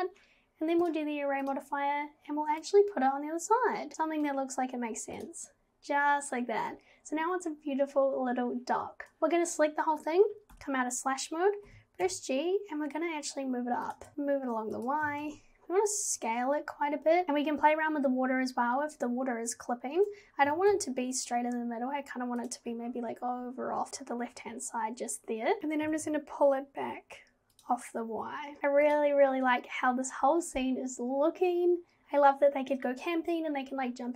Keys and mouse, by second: 1.5 click, 2.7-3.9 drag, 9.3-9.6 drag, 10.6 /, 11.7 g, 15.1 g, 20.5 g, 25.9 g, 28.6 Tab, 28.9 click.